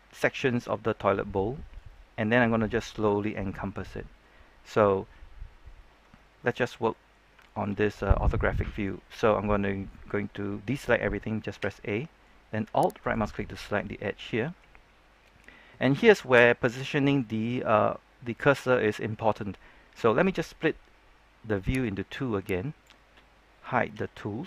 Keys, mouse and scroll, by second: 1.0-5.1 middle drag, 6.0 scroll up 1, 6.3 middle click, 7.4-9.1 shift+middle drag, 11.5 a, 11.9 middle click, 12.9 alt+right click, 13.3-15.2 middle drag, 15.3-15.7 scroll down 1, 15.7 middle click, 16.0 scroll down 1, 17.3 scroll down 1, 17.6-20.3 middle drag, 21.8-23.3 drag, 23.9 t.